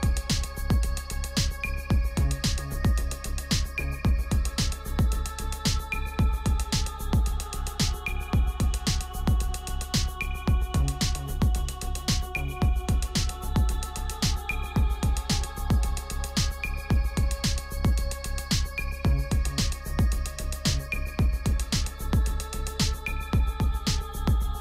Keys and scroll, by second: 0.7 ctrl+=, 1.6 space, 1.8 space, 1.9 space, 10.3 ctrl+=.